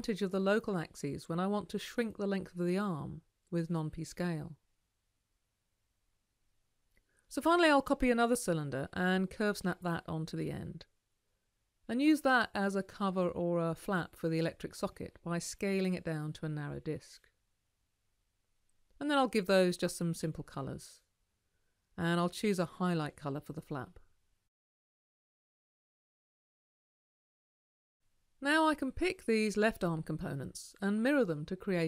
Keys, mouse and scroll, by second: 4.9 ctrl+c, 5.9 ctrl+v, 8.7-10.8 ctrl+alt+drag, 10.9-12.9 drag, 12.9-15.7 right drag.